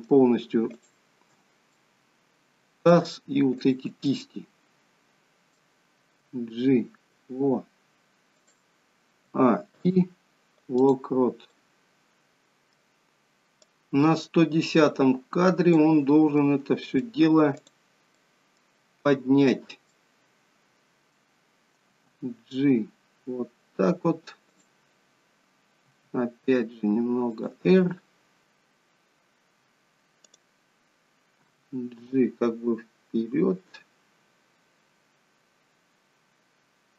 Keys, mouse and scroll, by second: 0.6 shift+click, 1.8 middle click, 3.5 shift+click, 4.0 middle click, 6.2 g, 9.1 a, 9.6 i, 11.5 middle click, 13.6 click, 16.3 middle click, 17.5 click, 18.1 middle click, 19.3 shift+click, 19.9 middle click, 21.3-21.7 scroll down 1, 21.8 g, 25.8 r, 28.4 click, 30.2 click, 31.5 g.